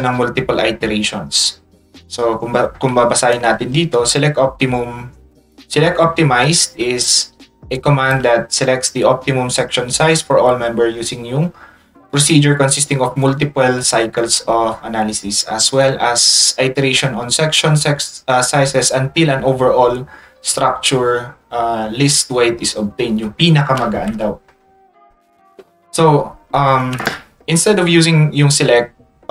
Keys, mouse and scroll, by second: 5.5 ctrl+click, 7.0 ctrl+shift+click.